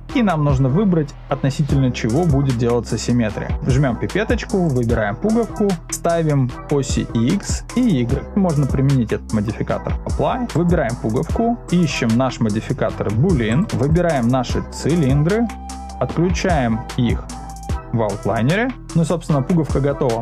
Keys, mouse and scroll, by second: 7.7 click, 9.2-10.0 drag, 10.5 click, 13.5 click, 13.9 click, 18.7 click.